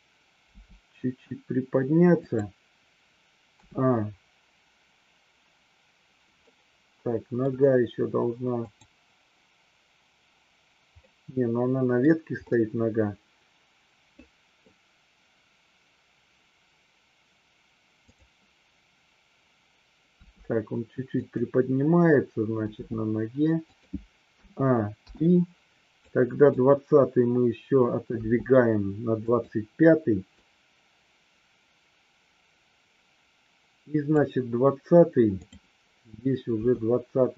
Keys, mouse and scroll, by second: 0.3 g, 2.2 click, 3.5 a, 6.3-7.3 middle drag, 8.5 click, 11.0-12.1 middle drag, 12.5-14.7 middle drag, 18.0 click, 20.2 r, 21.2 click, 22.7 g, 23.7 click, 24.2 a, 25.1 i, 26.1 click, 28.1 g, 29.1 click, 30.3-34.2 drag, 35.3 click, 36.5 g.